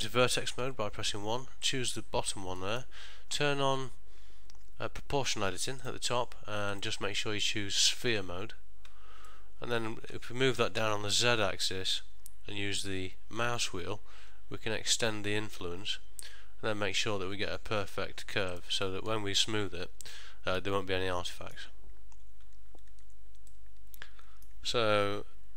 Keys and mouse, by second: 0.7 1, 1.8 click, 2.7 middle click, 5.9 click, 6.8 click, 9.4 middle click, 10.6 g, 19.0 middle click, 21.4 ctrl+middle click, 23.0 Tab, 23.6 middle click.